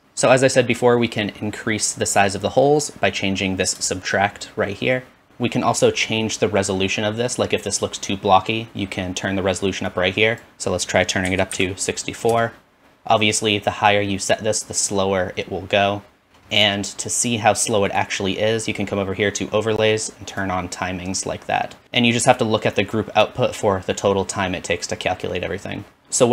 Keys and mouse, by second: 3.0-5.3 shift+drag, 8.0 click.